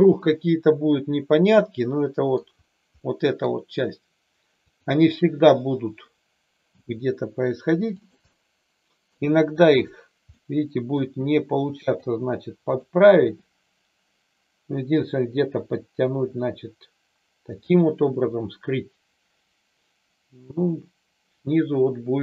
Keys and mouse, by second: 3.0-3.5 middle drag, 6.7 g, 8.0 click, 8.3 middle click, 10.4 middle click, 11.0 g, 11.9 click, 13.1 g, 17.5 click, 18.1-22.2 middle drag.